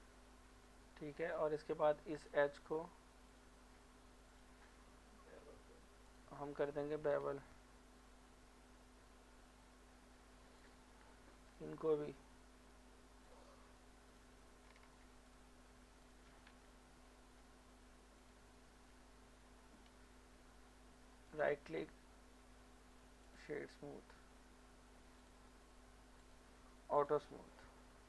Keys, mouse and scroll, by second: 0.2 shift+middle click, 0.4 scroll up 1, 1.0 Tab, 2.2 alt+click, 4.9 middle click, 6.0 alt+shift+click, 6.3 alt+shift+click, 7.3 ctrl+b, 8.3-8.9 scroll up 2, 8.9 scroll up 1, 10.6 click, 11.5 alt+shift+click, 12.9-13.3 scroll down 1, 14.1 alt+shift+click, 16.0 alt+shift+click, 16.9 ctrl+b, 18.2 click, 18.6 middle click, 19.1 middle click, 19.9 Tab, 20.6-21.3 scroll down 1, 21.3 right click, 23.2 click, 27.7-28.0 middle drag.